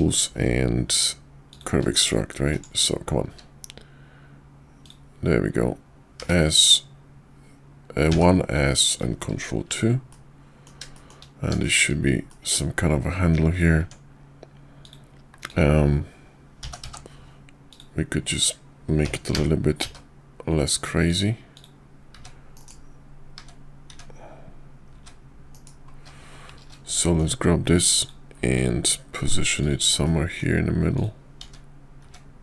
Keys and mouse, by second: 2.5-2.9 right drag, 3.3 q, 9.3 ctrl+2, 10.1-10.6 middle drag, 10.9 shift+middle drag, 11.6 shift+middle drag, 12.3 middle click, 13.8 Tab, 14.8 click, 15.4 click, 16.6 g, 18.2 click, 19.0 g, 21.5 click, 22.5 KP_5, 23.4 `, 23.9 `, 24.9 `, 25.5 KP_5, 27.0 shift+middle click, 28.0 click, 28.5 click, 29.6 click, 30.0 middle click, 30.9 click, 32.0 `.